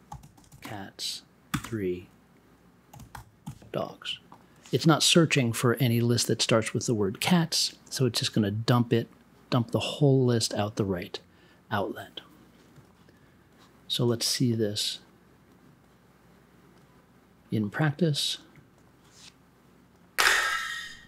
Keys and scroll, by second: 0.1 c, 0.6 space, 1.5 3, 1.6 space, 2.6-3.9 typing.